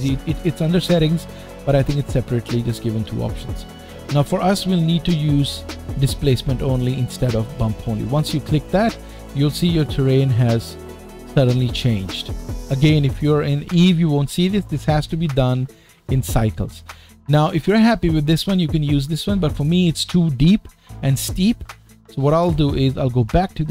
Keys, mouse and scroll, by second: 3.5 scroll down 1, 9.7 middle click, 17.9 middle click.